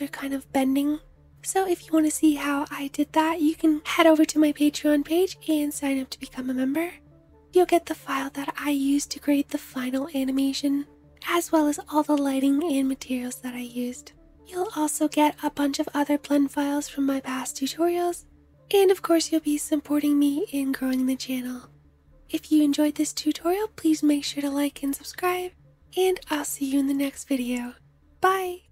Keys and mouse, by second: 6.3 space, 6.9-8.2 middle drag, 28.2 click, 28.2 middle click, 28.2 right click.